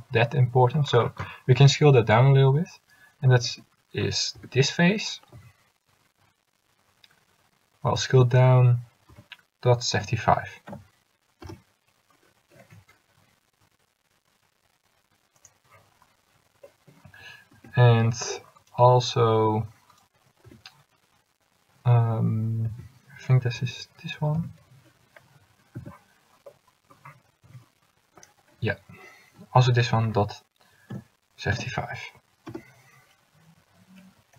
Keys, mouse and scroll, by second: 3.6 a, 4.5 l, 5.4 s, 12.8 g, 16.8 middle click, 17.7 a, 20.6 a, 22.8 a, 23.7 l, 24.5 g, 27.6 g, 29.7 s.